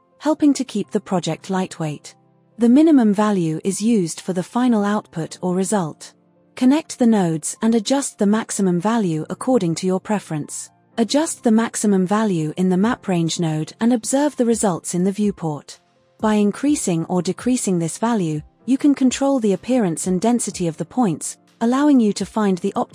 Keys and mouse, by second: 7.0-9.8 middle drag, 9.9-13.4 middle drag, 14.9 KP_0, 17.5 click, 18.8 KP_0, 18.9 KP_0.